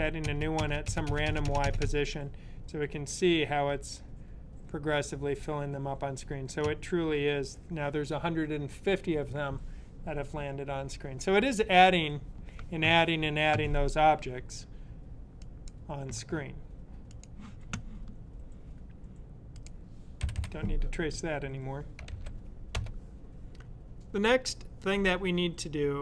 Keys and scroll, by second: 20.0 typing, 21.8-22.6 typing.